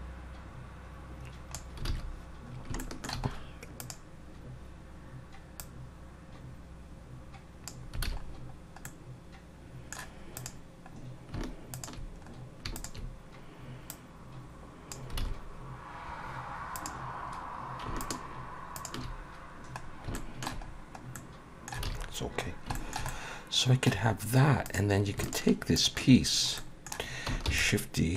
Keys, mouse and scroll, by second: 2.0 alt+a, 2.6 scroll up 2, 2.8 shift+middle click, 3.3 scroll up 1, 3.8 click, 5.6 click, 8.0 alt+a, 8.2-8.6 scroll down 3, 8.8 middle click, 10.4 click, 10.9 scroll up 1, 11.7 shift+click, 12.2 scroll up 3, 12.7 shift+click, 13.9 click, 15.2 alt+a, 15.5-15.9 scroll down 3, 16.7 click, 17.4 scroll down 1, 18.0 shift+click, 18.8 click, 19.8-20.1 scroll down 2, 20.1 shift+middle click, 20.7 scroll up 3, 21.1 middle click, 21.9 alt+a, 22.0-22.7 scroll down 5, 22.7 shift+middle click, 23.1 middle click, 24.1 scroll up 2, 24.7 click, 25.2 shift+click, 25.8 click, 26.3 scroll down 2, 26.6 middle click, 27.5 shift+d.